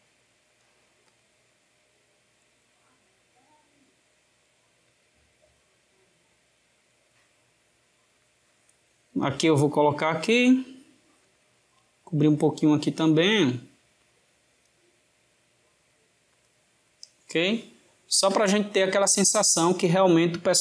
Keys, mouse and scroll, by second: 0.9 click, 3.2 click, 7.9 click, 10.5 click, 13.9 click, 17.4-20.6 ctrl+middle drag.